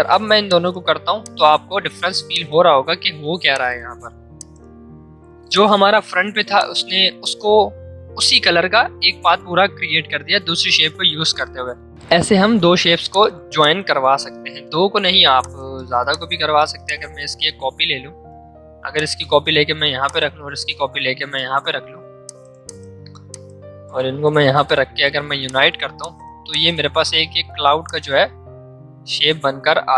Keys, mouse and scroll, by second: 3.0 ctrl+z, 3.4 click, 3.8 ctrl+z, 4.3 click, 6.5 shift+click, 13.0 click, 13.0 click, 16.8-18.8 alt+drag, 18.8 space, 19.0 click.